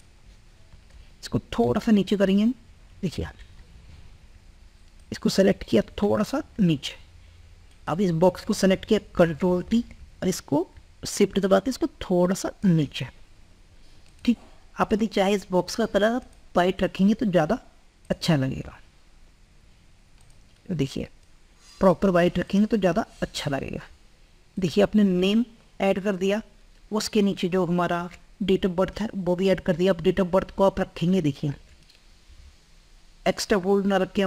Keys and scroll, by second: 9.1 ctrl+t, 12.7 ctrl+t, 31.2 ctrl+t, 32.4 ctrl+t.